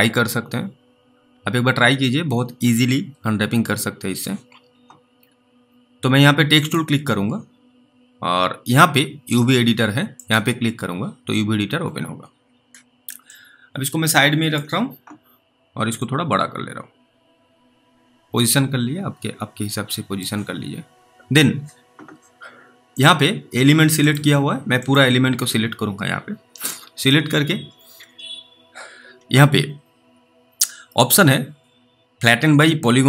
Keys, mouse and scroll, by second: 6.6 click, 10.1 click, 13.5 click, 16.3 click, 20.9 alt+middle click, 22.9 click.